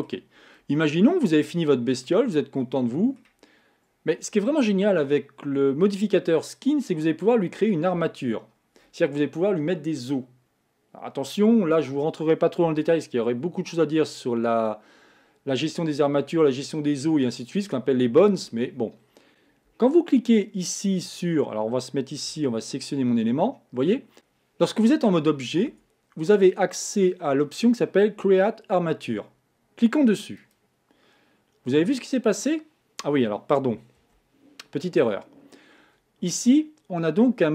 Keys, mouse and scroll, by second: 0.3 scroll down 2, 0.8-2.3 shift+middle drag, 2.3 scroll up 2, 2.6 scroll down 1, 2.7 middle click, 3.5-6.5 scroll down 1, 12.7 KP_1, 13.8-14.1 scroll up 2, 14.5-17.5 scroll down 1, 22.6 Tab, 25.7 Tab, 30.4 click, 34.0 z.